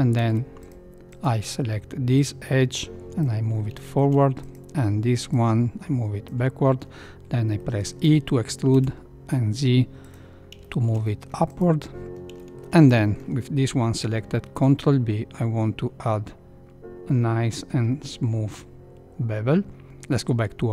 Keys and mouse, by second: 0.1 ctrl+2, 0.6 click, 1.1 click, 2.2-3.7 drag, 3.8 shift+middle click, 4.3 click, 5.3-6.3 drag, 7.6 middle click, 8.0 e, 10.6 shift+middle click, 11.1 middle click, 11.5 click, 12.4 shift+middle click, 12.8 middle click, 14.4 ctrl+b, 19.8 Tab.